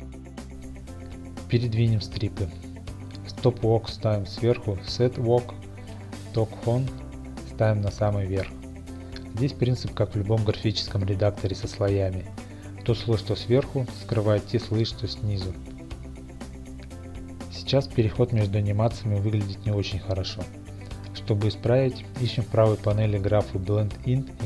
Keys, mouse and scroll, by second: 1.6 Tab, 3.5 click, 6.0 g, 7.3 click, 8.3 click, 9.5 g, 12.0 click, 13.3 click, 14.1 g, 17.2 click, 18.2 middle click, 18.7 click, 19.0 click, 19.7 click, 21.0 click.